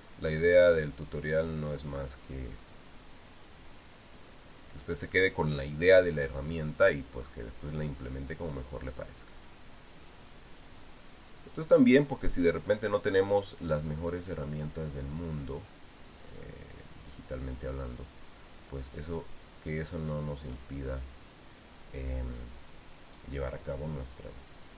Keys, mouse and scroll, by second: 5.4 shift+click, 12.3 shift+click, 18.3 shift+click, 20.8 shift+click.